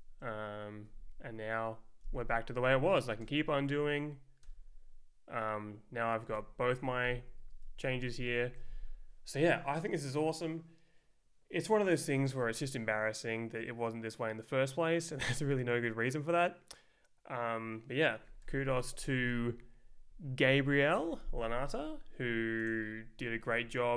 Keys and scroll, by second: 2.6 z, 3.2 Return, 4.4 Return, 6.2 space, 6.9 Page_Down, 7.9 Page_Up, 18.4 ctrl+f.